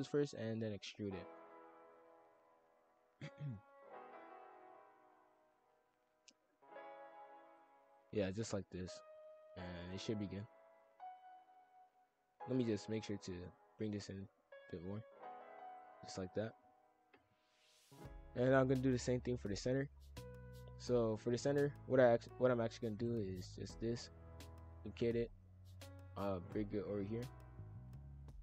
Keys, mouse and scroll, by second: 0.1 shift+f, 2.5 shift+click, 2.6 shift+f, 5.3 shift+click, 6.1-7.4 drag, 7.4 shift+f, 8.0 e, 8.8 click, 10.1 shift+f, 12.8 ctrl+l, 13.8 s, 15.9 shift+f, 18.1 click, 19.9 shift+f, 22.9 shift+d, 23.3 s, 26.5 click.